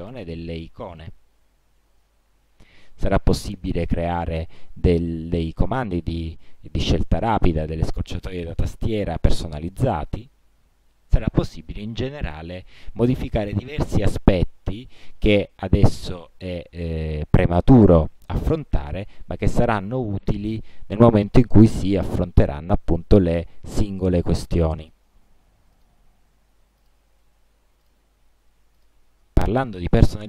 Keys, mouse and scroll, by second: 1.2 click, 3.3 click, 10.2-11.7 drag, 12.4 click, 15.2 click, 19.3-20.1 drag, 25.0 click, 25.9 click, 27.0 click, 28.0 click, 28.9 click.